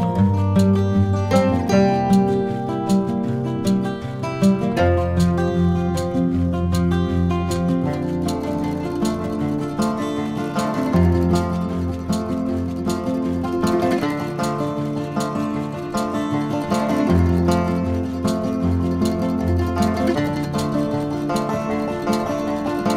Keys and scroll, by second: 7.2 i, 10.3 super+[, 11.3 super+[, 13.1 v.